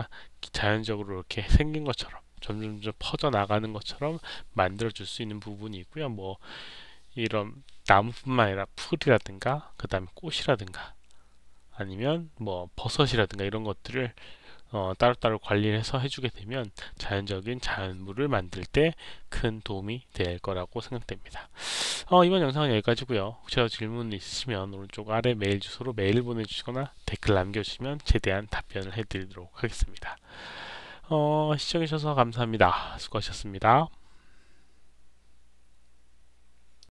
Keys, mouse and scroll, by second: 36.7 click.